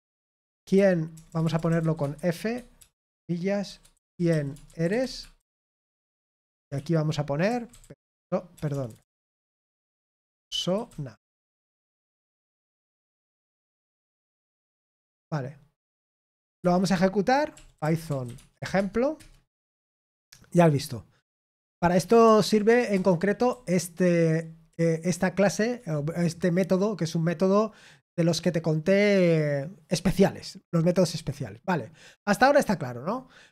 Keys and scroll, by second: 0.0-6.7 typing, 11.3-14.9 typing, 13.3 Escape, 14.9 Escape, 16.3-17.0 typing, 18.2-19.3 typing, 18.7 Tab, 19.1 Return, 21.9 ctrl+p, 22.2 ctrl+p, 22.9 Return, 23.4-25.6 typing.